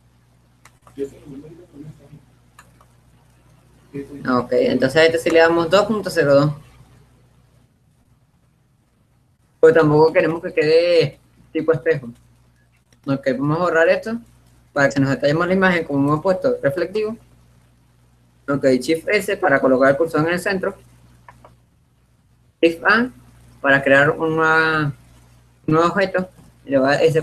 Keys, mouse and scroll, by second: 5.8-7.4 drag, 10.1-11.7 middle drag, 13.2-15.2 middle drag, 15.9-17.6 right drag, 16.9 Delete, 19.3 shift+s, 22.8 shift+a, 25.7-26.7 middle drag, 26.7 s.